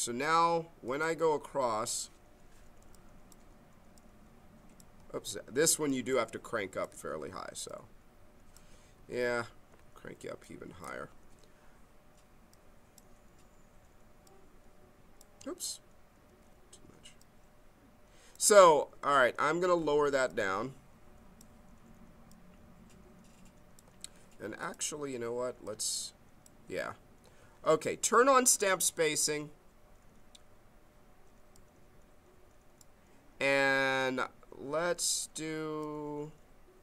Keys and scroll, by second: 5.1 ctrl+z, 5.9 m, 8.9 ctrl+z, 10.3 m, 16.2 ctrl+z, 18.6 ctrl+z, 25.5 ctrl+z, 27.4 ctrl+z.